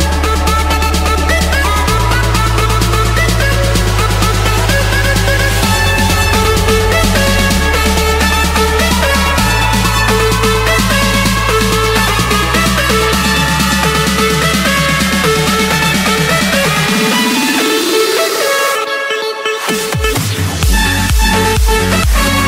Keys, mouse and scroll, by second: 1.2 Return, 1.3-2.1 scroll up 2, 2.1 click, 3.9 Escape, 5.7 click, 6.9-7.8 scroll down 1, 7.8-8.7 scroll up 2, 8.7 scroll up 1, 8.9-10.8 middle drag, 12.7 typing, 13.4 Return, 17.1-18.2 drag, 18.7 click, 19.0-19.4 scroll, 19.4 Escape, 21.0-22.1 scroll.